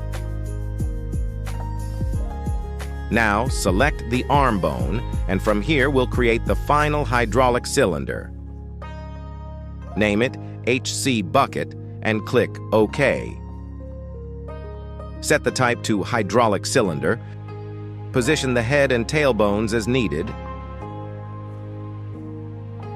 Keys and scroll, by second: 9.4 c, 10.3 -, 11.5 b, 11.8 u, 12.0 c, 12.3 e, 12.7 Return, 14.8 g, 18.0 Tab, 18.9 shift+s, 19.6 Tab, 20.5 shift+s, 21.5 g.